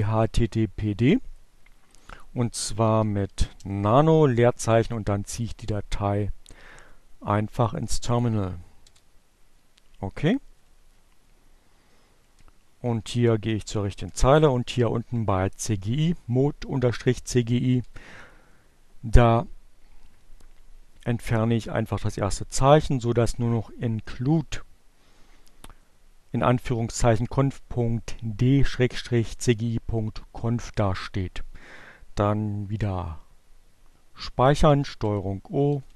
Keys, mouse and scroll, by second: 1.4-2.6 typing, 4.6 click, 5.7-6.8 drag, 6.9 click, 7.8 Return, 9.4 Page_Down, 11.0 Page_Down, 11.9 Down, 17.0 Delete, 32.5 ctrl+o, 34.1 ctrl+Return, 34.9 ctrl+x.